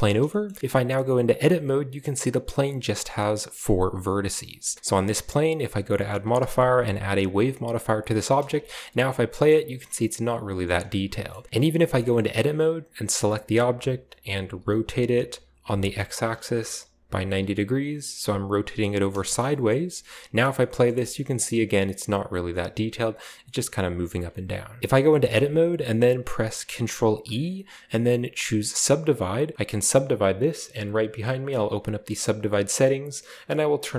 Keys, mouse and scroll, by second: 0.1 shift+middle drag, 0.5 shift+middle click, 0.7 middle click, 1.4 Tab, 2.3 right click, 2.3 scroll up 1, 2.9 right click, 3.5 right click, 4.1 right click, 4.4 Tab, 5.5 click, 6.2-6.6 typing, 7.6 click, 8.1 drag, 8.2 typing, 8.8 shift+middle drag, 9.5 middle click, 9.6-10.2 scroll down 1, 10.9-11.4 scroll up 1, 10.9-13.0 typing, 12.2-12.6 scroll up 1, 14.4 r, 15.6 typing, 17.1 typing, 19.1 Return, 19.7 middle click, 19.9 Tab, 20.3 space, 20.9 shift+middle drag, 21.2 middle click, 22.6 middle drag, 23.4-24.2 scroll down 1, 25.1 shift+middle click, 26.9 ctrl+e, 29.1 click, 31.6 drag, 33.8-33.9 drag.